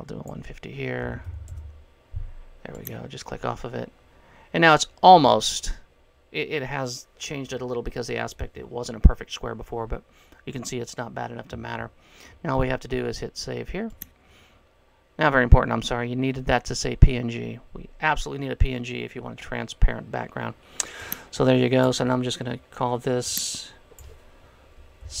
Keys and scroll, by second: 1.2 KP_1, 1.6 KP_0, 24.9-25.2 typing.